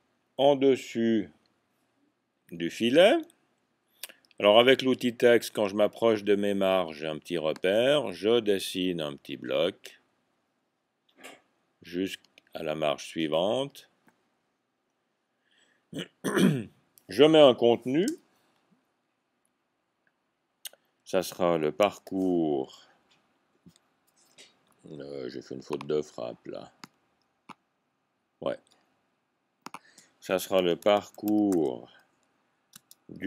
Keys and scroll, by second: 21.7 typing, 22.7 typing, 30.8-31.6 typing.